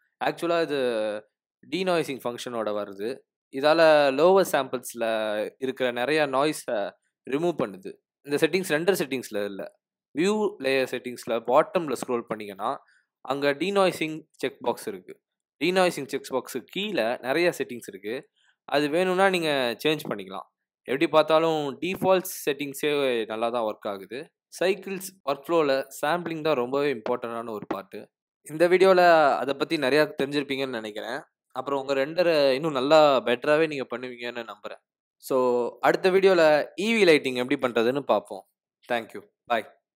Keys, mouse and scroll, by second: 4.3 click, 5.8-7.1 scroll up 9, 14.3 click, 15.6-17.3 scroll down 19, 17.7 click, 18.4 click, 18.9-19.9 scroll down 7, 24.5 click, 26.7 click, 27.1 F12.